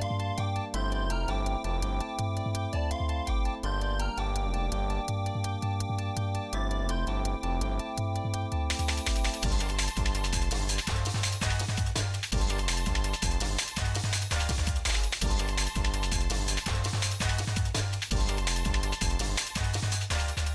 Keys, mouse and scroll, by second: 2.9-4.1 shift+middle drag, 4.4 click, 5.7 click, 7.7 middle click, 8.3 click, 9.6-10.7 drag, 12.2 shift+middle click, 12.6 middle click, 13.5 shift+middle click, 14.0 middle click, 14.5 shift+middle click, 15.9 ctrl+s, 16.4 middle click, 17.2 shift+middle click, 17.6 middle click, 18.0-18.4 scroll down 1, 18.5 shift+middle click.